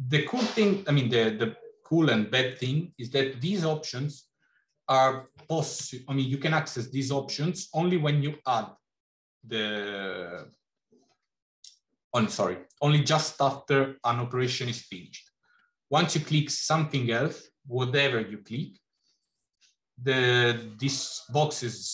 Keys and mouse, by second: 15.9 click.